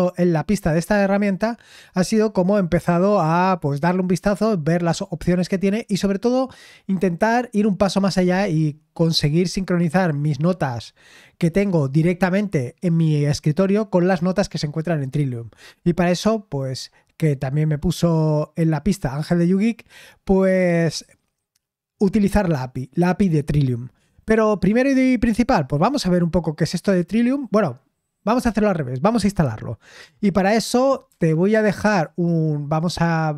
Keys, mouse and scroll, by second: 31.0 super+h, 31.4 super+l, 31.8 super+l.